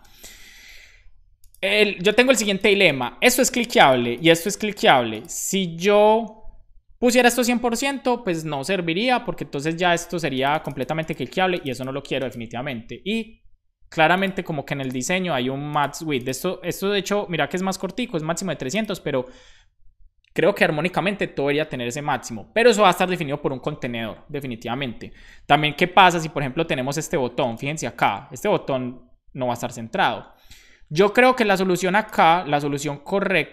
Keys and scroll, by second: 0.3 super+s.